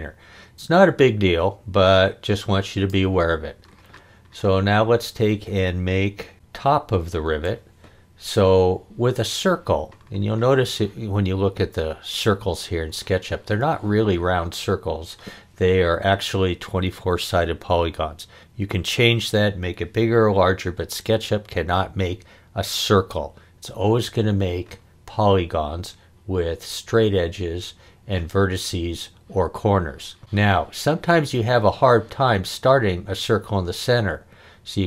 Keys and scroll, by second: 7.2 l.